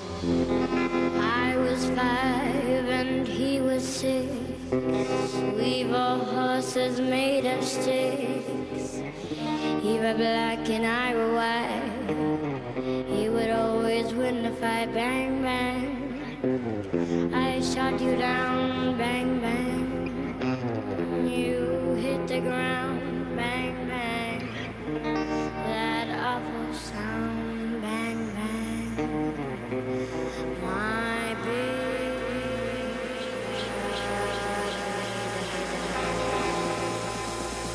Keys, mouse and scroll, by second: 0.1-2.4 middle drag, 5.5 ctrl+r, 15.7-18.1 middle drag, 18.3 a, 19.6-21.5 drag, 20.4-22.3 right drag, 21.0-23.4 middle drag, 24.0 KP_3, 25.2 e, 27.1-30.4 middle drag, 30.4-32.1 drag, 31.7-35.4 middle drag, 35.8 middle click, 37.0 KP_3.